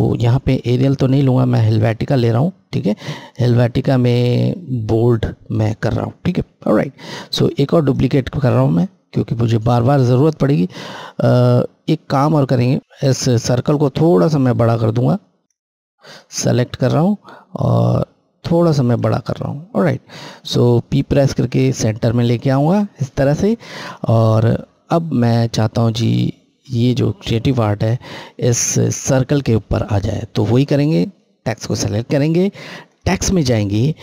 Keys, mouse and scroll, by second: 6.6 click, 7.7 right click, 12.1 scroll, 12.3-12.8 scroll down 1, 12.8 click, 15.0 shift+click, 16.3 click, 17.4 click, 21.0 p, 23.6 click, 24.3 scroll, 26.6 click, 32.7 click, 32.7 click.